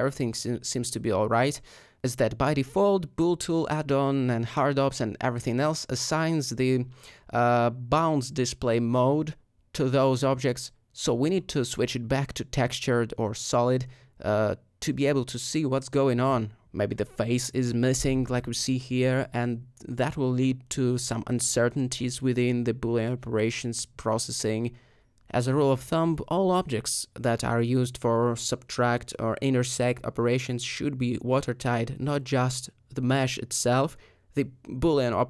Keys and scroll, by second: 1.4 Tab, 5.5 alt+Tab, 18.1 Tab, 18.1 g, 21.3 Tab, 24.8 shift+f, 27.6 alt+Tab, 34.6 g, 34.7 z.